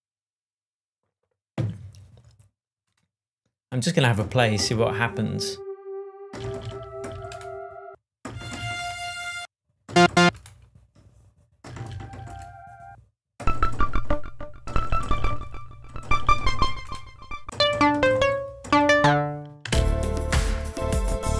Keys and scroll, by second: 19.6 space.